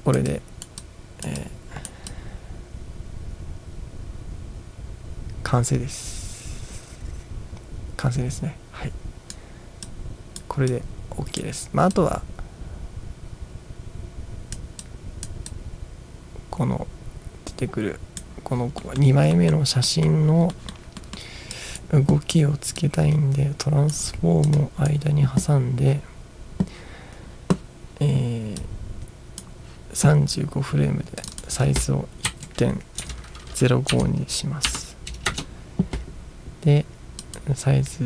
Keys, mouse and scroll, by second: 0.3-0.7 drag, 0.8-1.3 drag, 1.4 click, 2.1-9.3 drag, 9.8 click, 10.7-11.4 drag, 12.0-14.6 drag, 14.9-15.3 drag, 15.5-18.2 drag, 18.9 middle click, 19.4 middle drag, 19.9 middle click, 20.6 middle click, 21.0 middle drag, 21.6 drag, 22.9-24.0 drag, 24.5 click, 28.6-29.4 drag, 31.3 click, 32.3 Right, 33.0 BackSpace, 33.9 0, 34.7 5, 35.3 Return, 37.2 click.